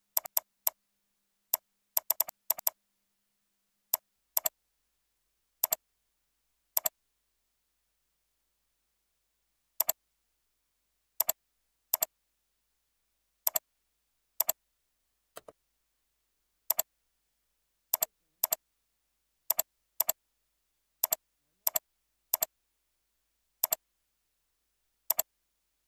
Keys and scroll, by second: 0.6 ctrl+a, 13.1 ctrl+c, 14.0 ctrl+v, 15.1 ctrl+a.